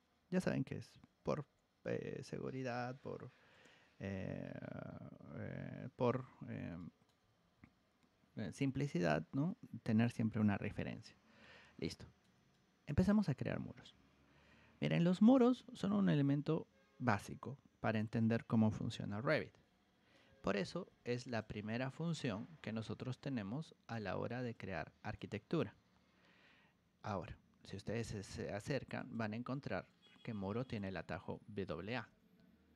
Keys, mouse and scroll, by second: 1.9 alt+Tab, 2.1 alt+Tab, 3.5 click, 4.5-5.0 scroll down 4, 6.7 middle drag, 7.2 alt+Tab, 7.5 alt+Tab, 11.7-12.2 middle drag, 12.5-13.0 middle drag, 20.8 ctrl+1, 21.2 click, 22.2 ctrl+click, 24.5 click, 26.6 Escape, 28.5 ctrl+1, 28.9 click, 29.8 ctrl+click, 31.7 r, 32.0 t, 32.7 click.